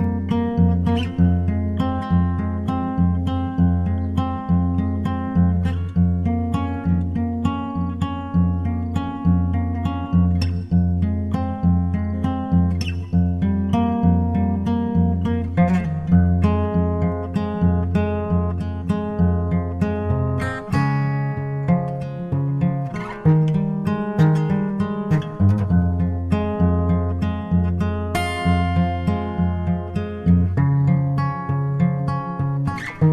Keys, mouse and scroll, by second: 1.6-5.2 middle drag, 4.5-6.3 drag, 6.5-8.7 middle drag, 8.4-10.1 drag, 10.5-12.3 drag, 13.3-15.3 middle drag, 16.9 g, 18.6 g, 20.0-21.8 drag, 21.1 shift+d, 25.3-27.2 drag, 27.0 g, 29.8-33.0 drag, 30.3 s, 32.2 shift+d.